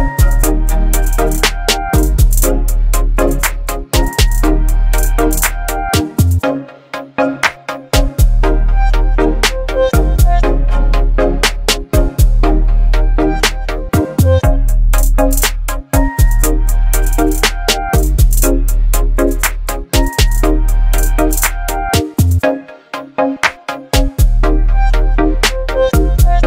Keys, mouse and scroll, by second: 5.0 right click, 5.8 click, 8.2 click, 16.1 click, 18.1 right click, 22.6 click, 25.3 click.